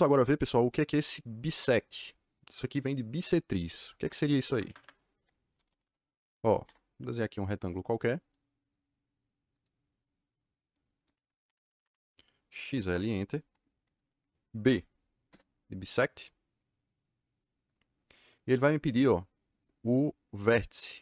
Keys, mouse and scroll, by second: 4.4 Escape, 4.7 Escape, 5.2-6.3 typing, 6.6 Return, 8.7 click, 9.5 click, 11.4 Escape, 11.6 Escape, 12.3-13.2 typing, 14.6 b, 15.2 KP_Enter.